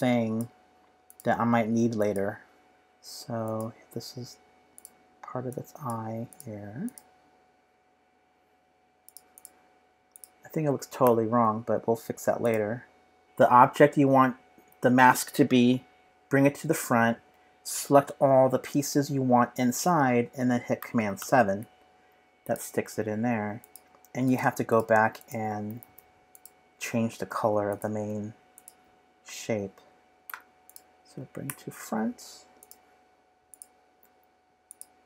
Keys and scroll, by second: 11.0 shift+super+], 21.2 super+7.